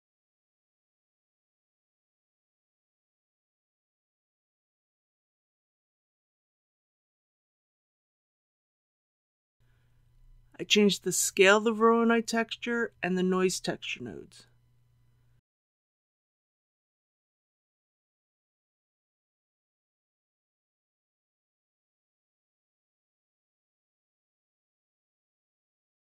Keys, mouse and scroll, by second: 2.2 scroll up 1, 12.9 click, 13.8 KP_9, 14.2 KP_5, 17.8 click, 18.7 KP_1, 19.0 KP_0, 22.7 ctrl+z, 23.3 ctrl+z.